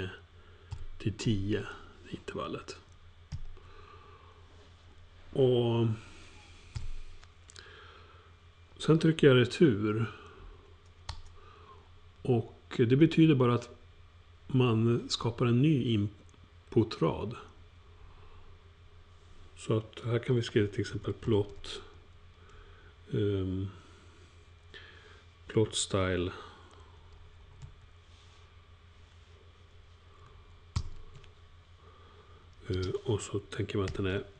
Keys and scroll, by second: 0.0-3.3 typing, 6.7 ,, 20.6-22.4 typing, 25.9-28.1 typing, 30.7 typing, 33.8 alt+shift+9.